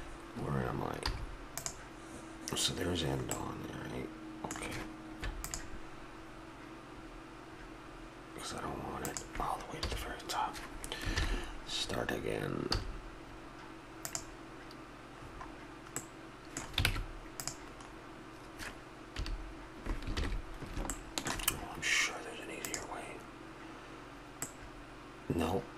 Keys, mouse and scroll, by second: 1.0 z, 3.4-5.1 middle drag, 5.2 ctrl+r, 9.9 a, 12.7 z, 15.1 middle click, 16.9 ctrl+Tab, 17.8 middle click, 19.2 KP_3, 20.1 ctrl+KP_3.